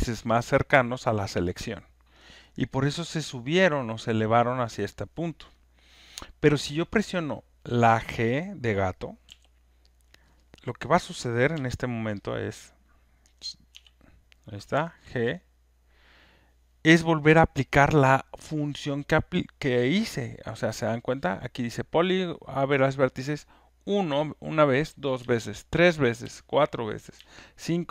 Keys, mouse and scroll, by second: 9.2 g, 11.5 g, 12.3 click, 14.5-15.2 typing, 25.2 g, 26.2 g, 27.2 g.